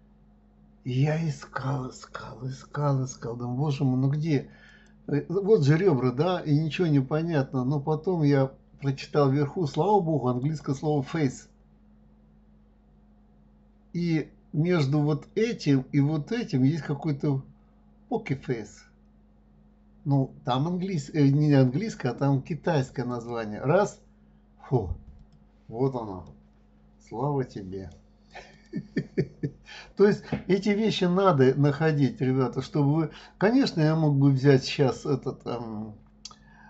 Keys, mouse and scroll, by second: 4.6-7.7 drag, 10.4 click, 25.2 click, 26.2-28.5 middle drag, 28.5 click.